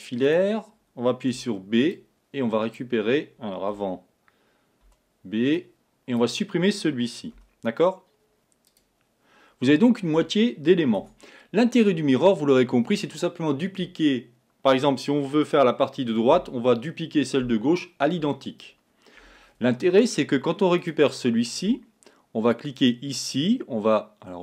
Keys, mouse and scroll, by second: 1.5 b, 7.4 x, 20.8 click, 22.8 click.